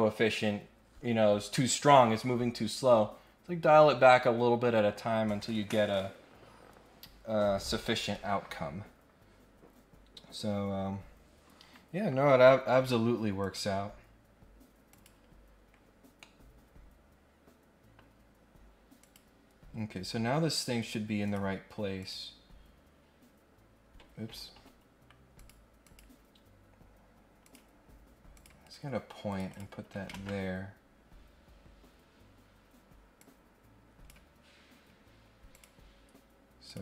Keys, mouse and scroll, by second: 11.5-12.5 scroll down 3, 13.4 click, 14.9 click, 16.2-17.9 middle drag, 19.0 click, 20.8 click, 21.2 click, 22.0 click, 22.9 scroll up 2, 25.3 click, 25.8 click, 27.4 click, 28.3 click, 28.6 Escape, 29.2 click, 29.5 click, 30.1 ctrl+Tab, 31.2 scroll up 1, 32.1 scroll up 1, 33.2 click, 35.5 click, 36.6 click.